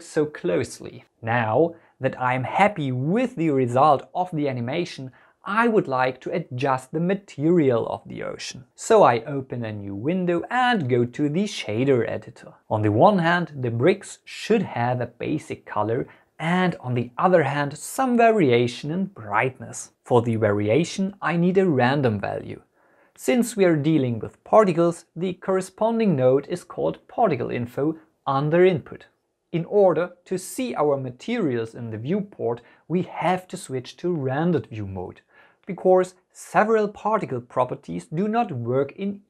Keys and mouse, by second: 10.1-11.6 drag, 12.0-13.4 drag, 14.6 n, 16.5 middle click, 16.8 click, 17.6 Delete, 17.8 middle click, 19.4 middle click, 20.3 shift+a, 30.8 click, 34.4-36.1 drag, 38.3-39.2 drag.